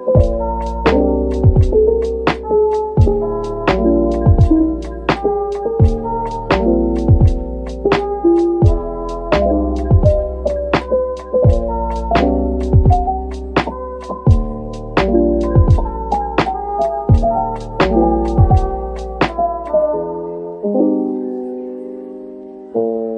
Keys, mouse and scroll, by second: 3.0 double click, 3.6-4.9 typing, 6.7 double click, 7.9-10.0 typing, 11.6 double click, 12.1-13.5 typing, 15.0 click, 15.7-17.5 typing, 18.2 double click, 18.7-20.4 typing, 21.0 double click, 22.4-23.1 typing.